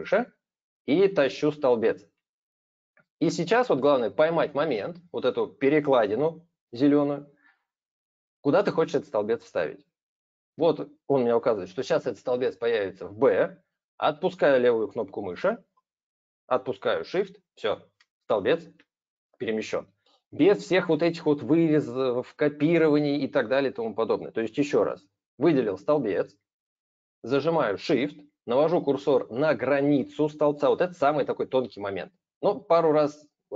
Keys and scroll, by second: 24.7 ctrl+z.